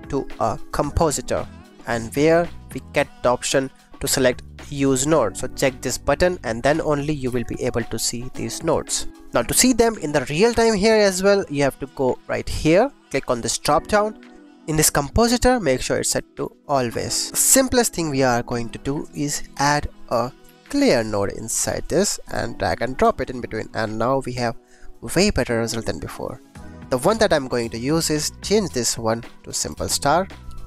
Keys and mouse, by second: 2.1 click, 4.3 click, 4.6 click, 5.0 click, 5.3 click, 7.3 g, 8.0 click, 13.5-17.3 drag, 18.8 shift+a, 23.0 click, 26.1 click, 28.6-29.7 drag.